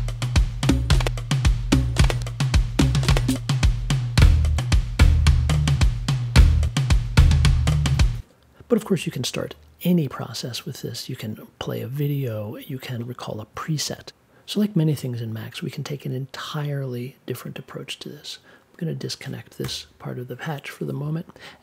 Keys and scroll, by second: 19.6 BackSpace.